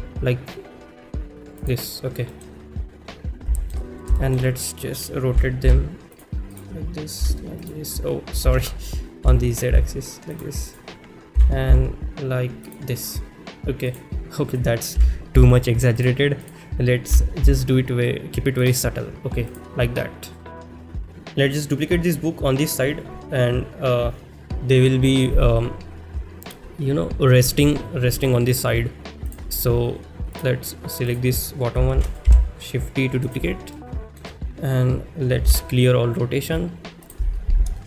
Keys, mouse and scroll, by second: 1.6 click, 2.3 middle click, 3.7 shift+middle click, 4.2 shift+middle drag, 4.5 middle drag, 6.1 click, 6.1 r, 6.1 z, 7.6 click, 7.6 r, 8.4 ctrl+z, 10.3 click, 10.3 r, 10.3 z, 12.6 click, 13.9 click, 14.0 middle drag, 15.0 r, 16.0 click, 16.0 z, 17.5 z, 17.5 r, 18.6 click, 20.4-21.0 middle drag, 29.3 click, 33.3 shift+d, 33.3 z, 33.8-34.2 shift+middle drag, 37.1-37.8 drag, 37.1 n.